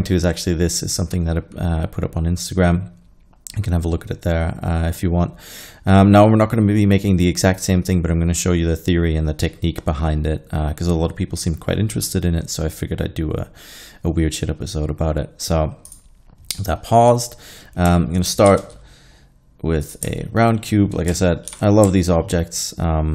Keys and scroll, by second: 18.5 shift+a, 21.5 ctrl+2.